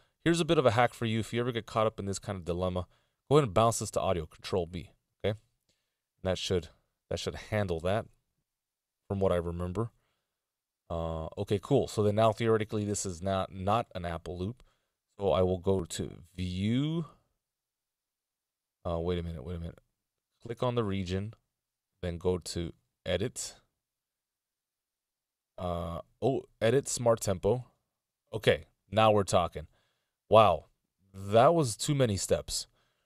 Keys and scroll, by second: 3.1 ctrl+b, 7.0 Return.